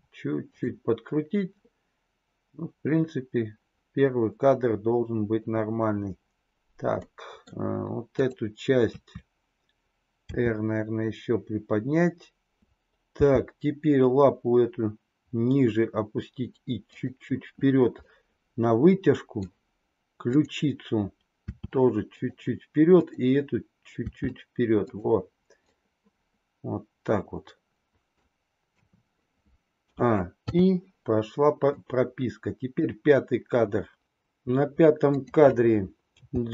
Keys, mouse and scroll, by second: 6.9-7.6 middle drag, 8.8 KP_3, 10.1 r, 13.2 g, 17.9-19.4 middle drag, 20.3-20.8 drag, 21.4 r, 23.9 r, 25.8-28.2 middle drag, 28.7 KP_3, 29.8 a, 30.4 i, 31.7-32.8 drag, 35.0 click, 36.2 g.